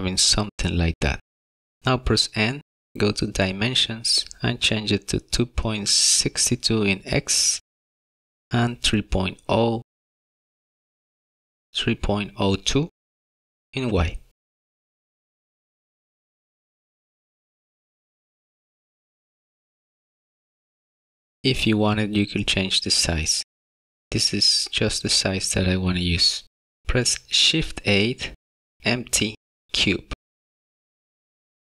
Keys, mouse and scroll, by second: 1.3 n, 4.0 click, 12.6 click, 18.5 n, 19.2-19.9 scroll up 5, 19.9 middle click, 25.1-25.6 scroll down 2, 25.6 shift+middle click, 26.5 middle click, 27.0 shift+a.